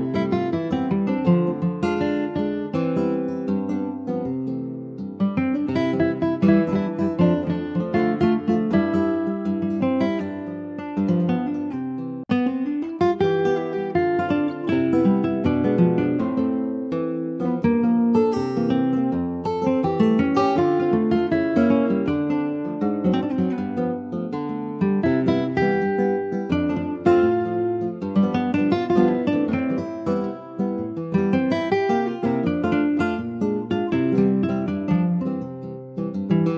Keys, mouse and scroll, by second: 2.3-5.2 drag, 5.2 Tab, 5.4 click, 5.7 scroll down 3, 5.9 middle click, 6.4 click, 7.5 click, 7.8-8.3 scroll down 1, 8.3 click, 8.8-11.6 right drag, 11.6 click, 12.2 ctrl+s, 12.4-13.6 middle drag, 13.6 ctrl+s, 14.1 /, 14.6 click, 14.9-16.5 middle drag, 16.5 scroll down 2, 16.8 middle click, 17.0-17.5 scroll up 1, 17.5 ctrl+s, 17.8 click, 18.3 ctrl+s, 18.5 middle click, 18.8-19.1 scroll up 2, 19.1 ctrl+s, 19.3 middle click, 19.6-20.1 scroll up 1, 20.1 shift+click, 21.5 /, 21.9 click, 22.3 middle click, 23.1 click, 23.4 Tab, 23.7-24.0 scroll up 2, 24.0 middle click, 24.8-25.3 shift+scroll up 2, 25.3 click, 25.8 scroll up 1, 26.0 shift+middle click, 26.5 3, 26.7 click, 27.1 middle click, 27.9-28.9 drag, 28.9 scroll down 3, 29.1 middle click, 29.6 ctrl+s, 29.8 shift+middle click, 30.7 ctrl+r, 33.4 alt+z, 33.9 alt+middle click, 34.6 click, 35.4 alt+middle click, 36.2-36.5 right drag.